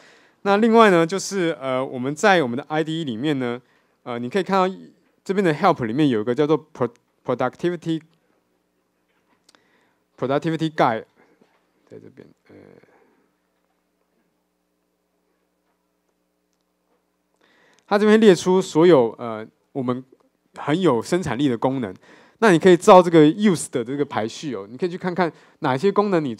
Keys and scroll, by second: 11.6 ctrl+alt+shift+super+v.